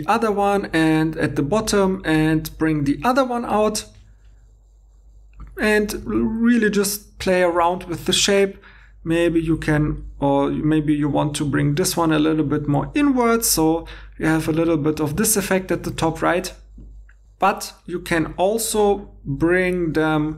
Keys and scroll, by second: 0.6 g, 6.0 alt+Tab, 7.6 alt+Tab, 9.4 g, 17.2 alt+Tab.